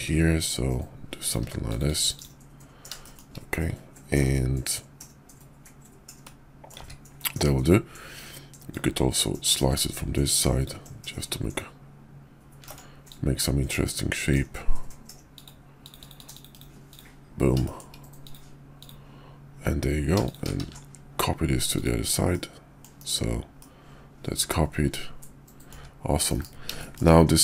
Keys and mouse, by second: 2.9 typing, 3.0 shift+middle drag, 6.1-6.7 middle drag, 6.9 `, 8.6-10.7 drag, 13.1-14.3 drag, 16.9 click, 17.6 shift+drag, 18.8 click, 20.2 shift+click, 20.6 alt+x, 21.8 click, 22.2-22.8 middle drag, 23.0 KP_5, 23.5 middle click, 23.6 click, 23.9-25.7 middle drag, 25.7 `, 26.2 KP_5, 26.7 shift+click.